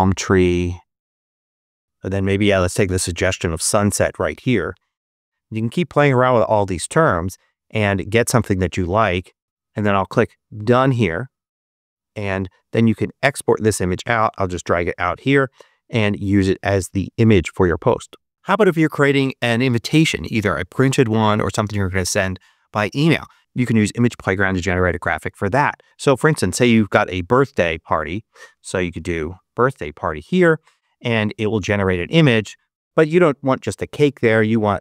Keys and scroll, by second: 0.0-0.9 typing, 0.9 Return, 26.0-29.1 typing, 29.5 Return.